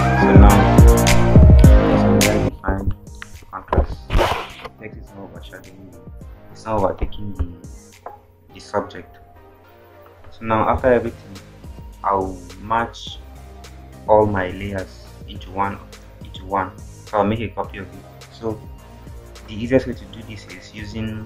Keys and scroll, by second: 20.4 e.